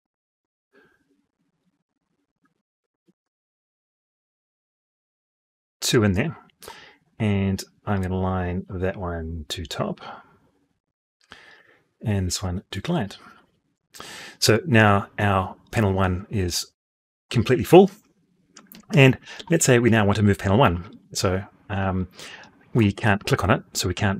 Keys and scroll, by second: 18.5 Escape.